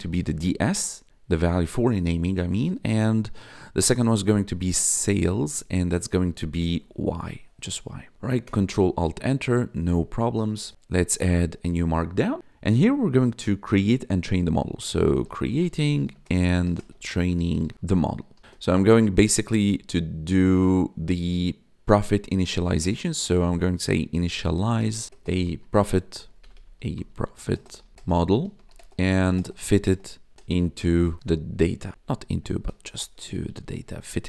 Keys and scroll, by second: 0.0-1.0 typing, 2.4 space, 3.5-6.8 typing, 7.9 Right, 8.4 ctrl+alt+Return, 14.7-20.2 typing, 23.9-31.8 typing, 31.9 ctrl+Left, 32.5 Right, 33.3 BackSpace.